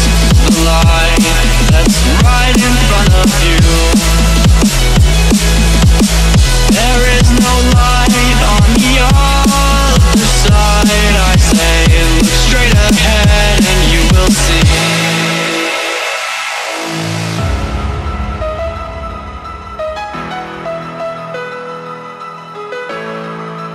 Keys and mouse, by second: 2.6 ctrl+z, 3.3 click, 10.6 click, 16.7 space, 17.3 right click, 18.1 click, 19.5-23.7 alt+shift+drag.